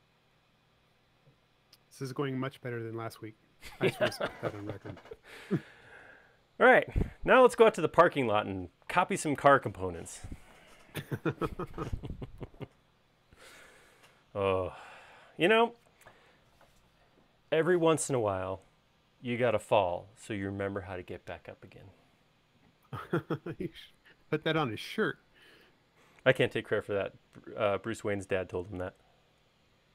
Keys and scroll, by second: 13.3 super+s.